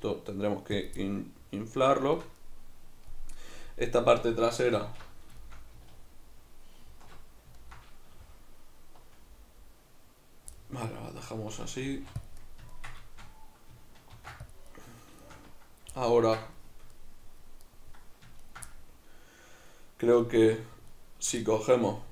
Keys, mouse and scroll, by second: 0.8 click, 1.0-12.3 middle drag, 4.8 alt+q, 6.0 alt+q, 11.8 g, 12.3 click, 12.4-17.6 middle drag, 14.1 ctrl+r, 14.8 right click, 17.6-18.5 right drag, 18.7-20.2 middle drag, 20.2-21.0 shift+right drag, 21.4-22.1 middle drag.